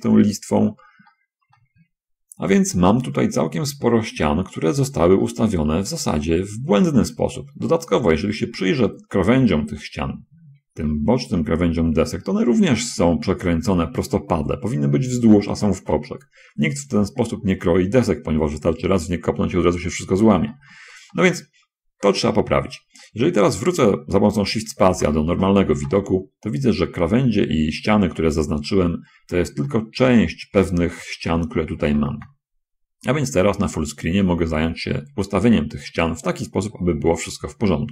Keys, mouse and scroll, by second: 0.1-1.3 scroll down 3, 1.5-3.1 shift+drag, 3.4-5.1 drag, 5.6-7.9 drag, 8.0 click, 8.5 middle click, 9.1-10.1 middle drag, 10.7 scroll up 1, 16.8 scroll down 1, 19.8 scroll down 1, 20.9 shift+middle click, 21.5 shift+middle click, 22.5-24.3 middle drag, 25.3 shift+space, 29.0-29.5 scroll up 2, 30.0 shift+middle click, 32.2 shift+space, 33.4 middle click.